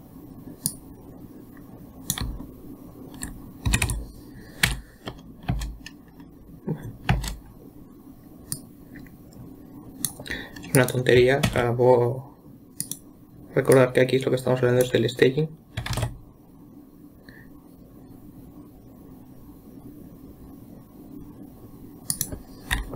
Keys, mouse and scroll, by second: 1.1 click, 2.7-3.6 Left, 4.1 Right, 4.3 Right, 5.1 Left, 5.9 space, 7.6 space, 9.0-11.3 drag, 11.9 shift+d, 14.2-16.4 drag, 16.4 shift+e.